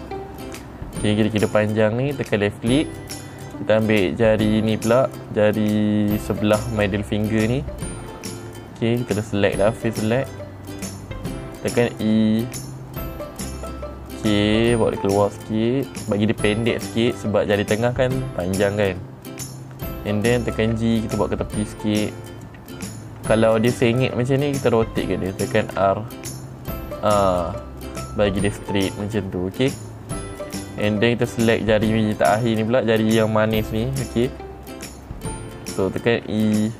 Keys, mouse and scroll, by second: 2.7 click, 3.9 click, 9.1-10.4 middle drag, 11.2 click, 12.2 e, 16.5 click, 21.1 g, 22.8 click, 24.0 middle click, 24.0 scroll up 2, 26.2 r, 28.0 click, 31.8 click.